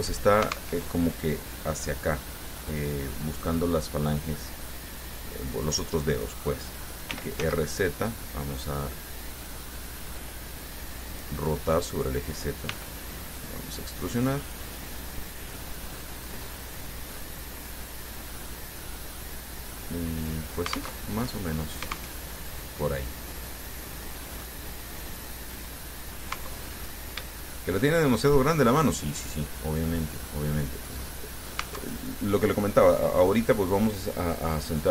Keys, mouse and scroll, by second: 0.9 alt+Tab, 3.0 click, 7.3 r, 7.6 z, 10.0 click, 12.1 right click, 12.9 e, 15.1 click, 17.2-21.2 middle drag, 21.2 alt+Tab, 22.4 alt+Tab, 23.3 click, 24.3-24.9 scroll down 2, 25.1-26.6 drag, 26.6 Tab, 26.9-27.4 scroll up 2, 27.5 shift+click, 28.3-31.8 shift+drag, 31.9 Tab, 32.4-34.1 drag.